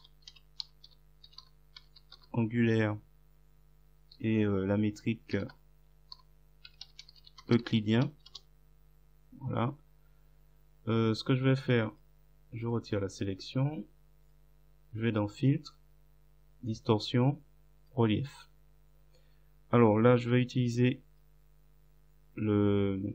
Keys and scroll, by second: 0.0-2.5 typing, 5.4-8.3 typing, 8.3 Return.